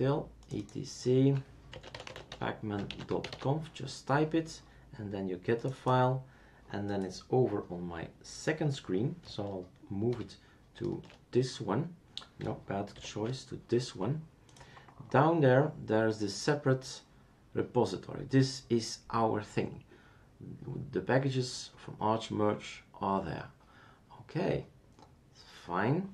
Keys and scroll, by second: 1.5-3.8 typing, 10.1 super+6, 12.9 super+7.